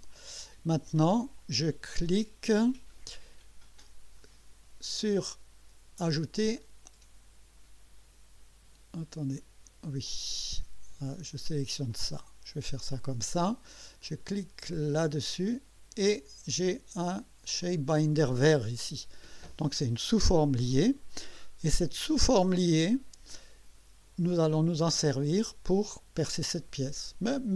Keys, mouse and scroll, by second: 1.4 click, 6.6 click, 10.1 click, 11.9 click, 15.2 click, 17.6 click, 21.7-24.0 drag.